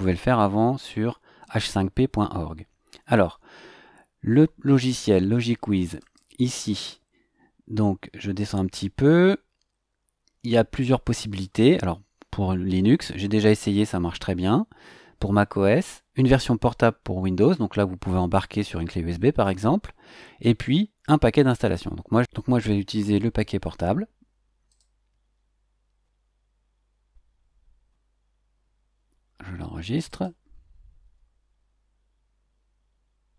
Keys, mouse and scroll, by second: 6.0 click, 7.1-7.5 scroll down 2, 8.1-9.1 scroll down 4, 9.5 scroll down 2, 10.2 scroll down 2, 10.5-11.9 scroll up 2, 24.7 click, 30.0 click.